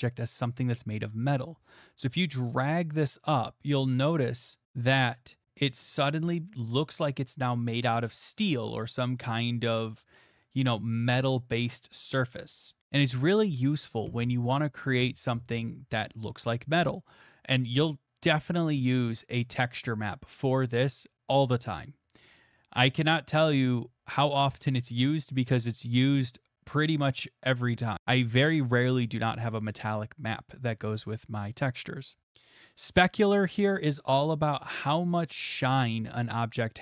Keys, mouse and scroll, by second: 5.0 click, 7.9 middle click, 8.5 middle click, 8.6 middle click, 9.2 middle click, 11.8 middle click.